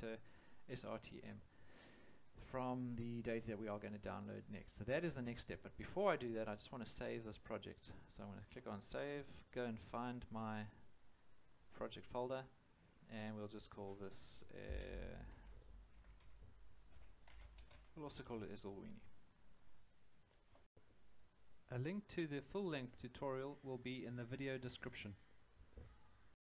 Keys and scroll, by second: 15.3-18.2 typing.